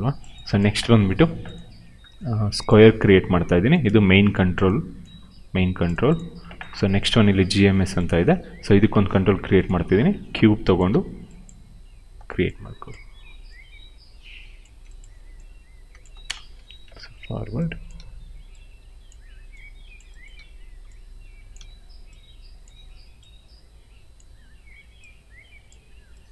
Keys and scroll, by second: 3.0 r, 10.8 w, 11.5 r, 12.1 w, 12.8 r, 14.5 w, 15.9 space, 16.5 f, 17.9 r, 19.0 w, 20.3 r, 24.2 w.